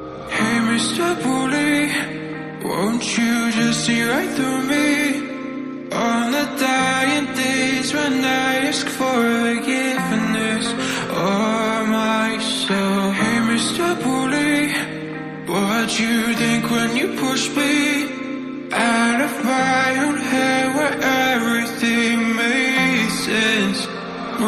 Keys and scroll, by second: 2.1 k, 2.4 ctrl+j, 5.0 ctrl+j, 15.6-20.8 typing, 22.4-24.4 typing.